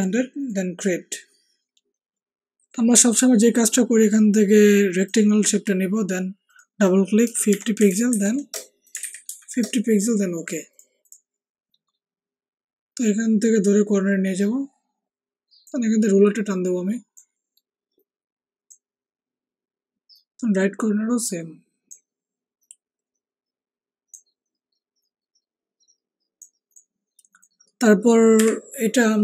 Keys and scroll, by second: 7.2-9.2 typing, 28.4 Delete.